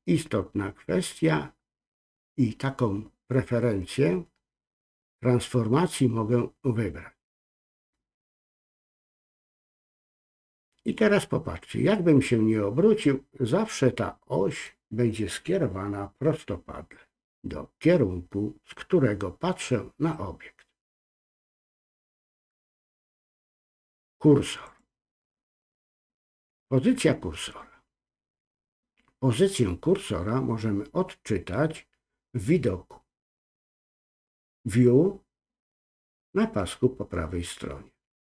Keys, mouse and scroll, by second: 9.0-14.6 middle drag, 18.6 scroll up 2, 18.7-22.0 middle drag, 23.0-26.2 drag, 26.7-28.4 middle drag.